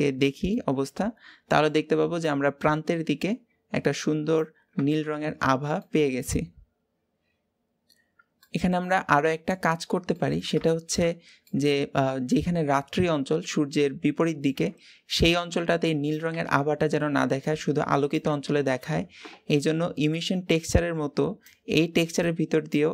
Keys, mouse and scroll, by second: 0.3-5.3 middle drag, 5.3 scroll down 2, 5.5-7.8 middle drag, 8.4-9.5 middle drag, 9.5-9.9 scroll up 2, 9.9-12.6 middle drag, 12.6 scroll up 1, 12.9-13.6 scroll down 2, 13.6-21.3 middle drag, 21.3-22.9 drag.